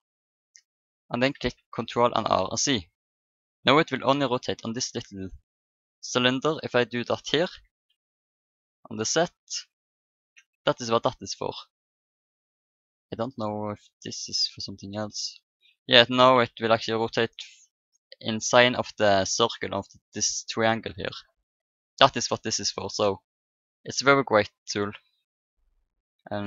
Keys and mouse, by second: 0.4 r, 6.3-7.4 drag, 7.4 r, 11.1-12.9 drag, 16.4 r, 22.3-23.5 middle drag, 23.5-25.4 drag.